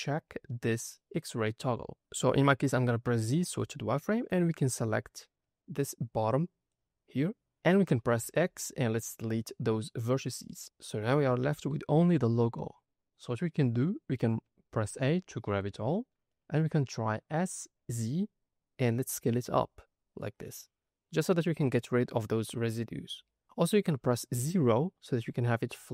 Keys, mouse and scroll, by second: 0.3-1.3 scroll down 3, 2.1-2.9 scroll up 1, 2.9 z, 4.5 click, 7.3 scroll up 3, 8.1 x, 10.8 middle click, 11.9 middle click, 12.9-14.7 scroll down 2, 14.7 a, 15.1 middle click, 15.7-16.1 scroll up 2, 17.3 s, 17.9 z, 25.1 KP_0.